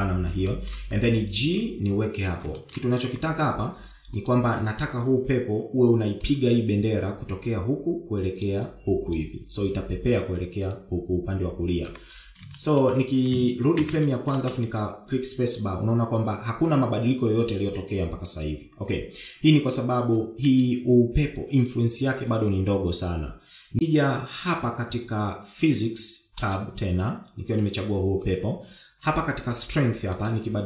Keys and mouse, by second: 1.3 shift+middle click, 2.3 g, 3.4 shift+middle click, 6.8 d, 7.1-9.3 drag, 9.3 d, 9.3 d, 9.4-11.5 d, 9.5-12.7 drag, 12.7 d, 12.8 d, 13.4 shift+middle drag, 14.6 shift+Left, 15.2 space, 21.3 space, 27.4 click.